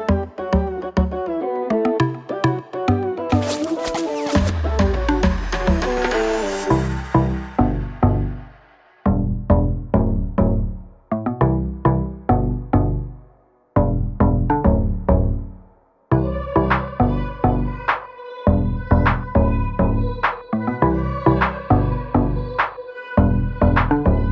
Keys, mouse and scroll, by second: 0.8 click, 10.6 click, 11.0 Left, 12.0 Left, 12.0 click, 12.3 space.